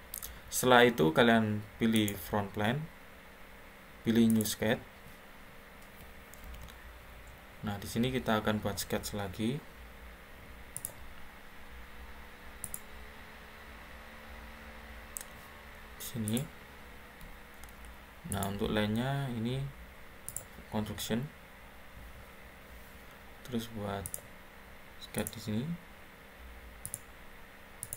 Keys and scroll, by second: 6.3 ctrl+8, 17.2 Escape, 17.3 Escape.